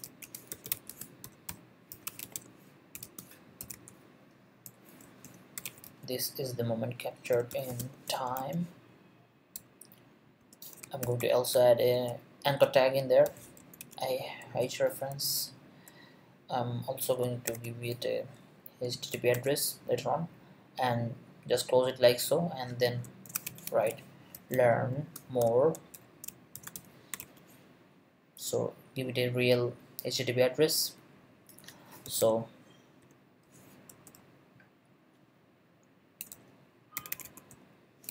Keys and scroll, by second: 0.0-8.9 typing, 11.0-14.3 typing, 14.5 Return, 15.3 shift+Return, 17.5 shift+3, 18.4 shift+Right, 19.1 shift+Right, 19.3 shift+., 23.0-27.7 typing, 31.8-34.1 typing, 36.2-38.1 typing.